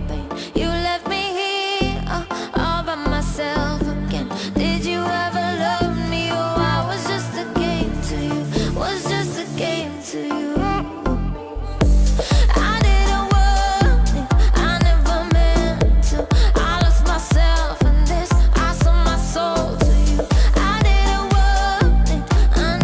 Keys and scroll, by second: 0.1 ctrl+alt+z.